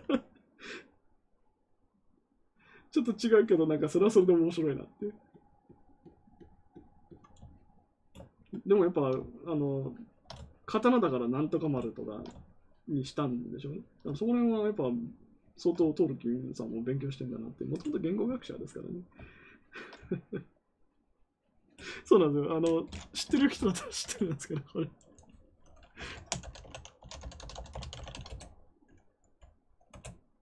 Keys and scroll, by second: 25.9-28.5 typing, 29.8 Return.